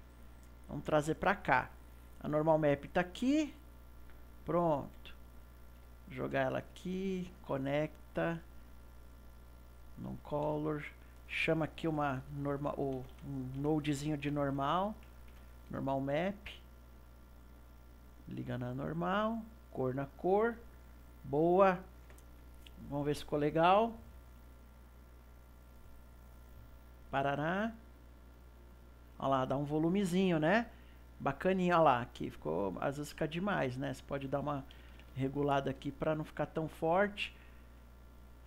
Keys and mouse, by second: 4.2 click, 4.4 middle click, 5.3 click, 5.9-7.4 ctrl+middle drag, 7.4 click, 8.9-10.3 drag, 10.5 shift+a, 13.1 BackSpace, 17.6-20.2 drag, 25.7 click, 34.1-37.2 drag, 38.0 middle click.